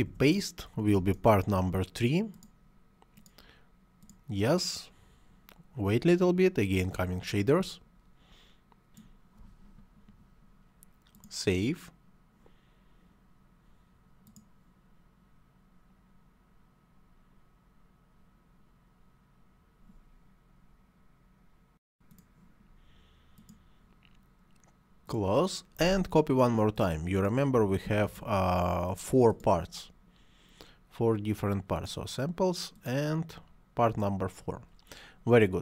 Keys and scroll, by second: 0.0 ctrl+v, 27.7 ctrl+c, 27.9 ctrl+v.